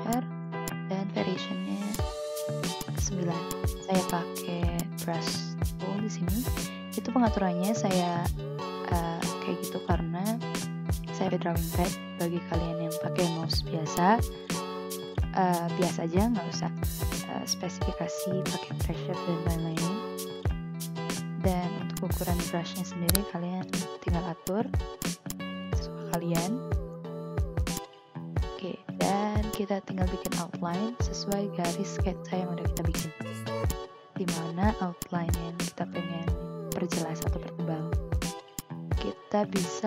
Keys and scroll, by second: 6.0 ctrl+z, 13.9 ctrl+z, 21.0 a, 25.8 ctrl+z, 31.8 ctrl+z, 34.3 ctrl+z, 35.8 ctrl+z.